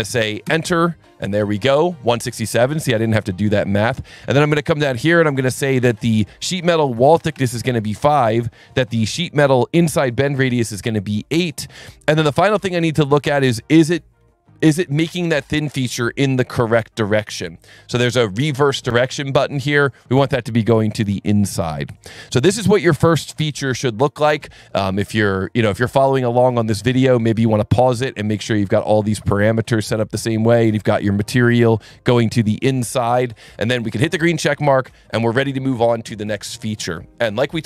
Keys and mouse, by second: 0.4 KP_Enter, 4.5 click, 7.3 KP_5, 9.0 click, 9.6 click, 10.5 KP_8, 11.3 click, 16.3 click, 17.0 click, 17.6 click, 18.3 click, 18.8 click, 19.5 click, 31.6 click, 32.0 click, 34.4 click, 35.1 click.